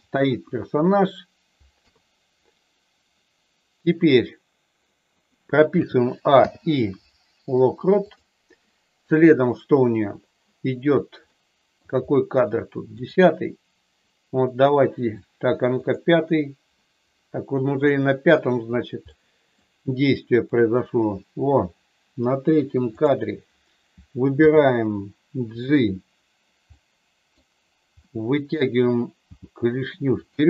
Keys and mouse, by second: 0.3 KP_1, 1.7 KP_3, 5.7 a, 6.3 i, 11.3 middle click, 13.0 click, 15.8 click, 19.2 middle click, 20.4 click, 22.9 click, 24.3 g, 25.5 click, 26.7 middle click, 27.9 middle click, 29.2 g, 30.2 click.